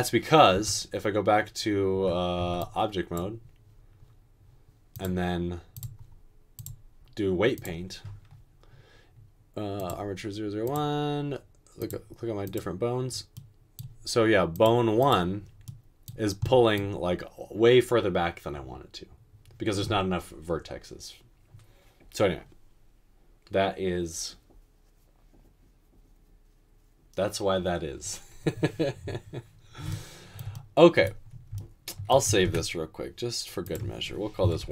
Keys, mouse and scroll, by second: 0.6 Tab, 1.9 Tab, 2.4 Tab, 32.5 ctrl+s.